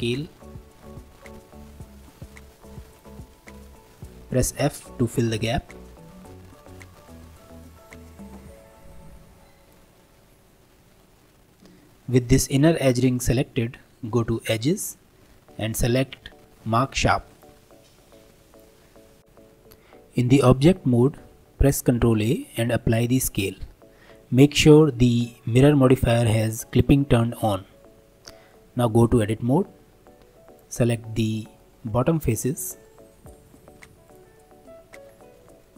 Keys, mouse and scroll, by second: 4.5 f, 5.1-7.7 middle drag, 7.7 g, 10.1-13.1 middle drag, 14.5-17.7 drag, 18.2 Tab, 18.5 click, 18.9-19.2 scroll down 1, 20.7-21.9 middle drag, 21.9 ctrl+a, 28.5-29.6 middle drag, 29.6 3, 30.0 click, 30.8 middle click, 31.8-32.8 scroll down 3, 32.8 shift+click, 33.5 middle click, 34.1 shift+click, 34.4 middle click, 35.1-35.6 scroll up 2, 35.6-35.7 shift+middle drag.